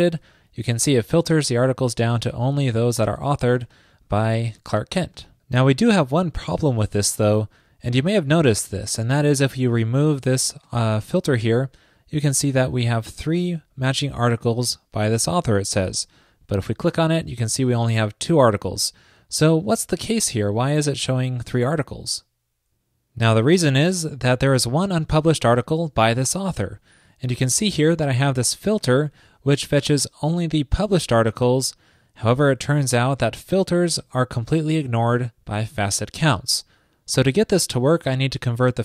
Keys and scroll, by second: 0.1 super+r.